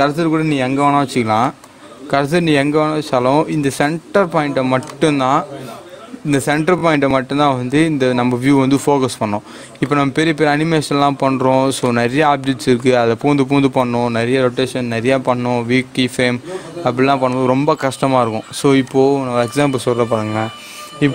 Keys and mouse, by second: 1.4 shift+right click, 2.9-11.7 drag, 11.7-17.2 drag, 17.3 click.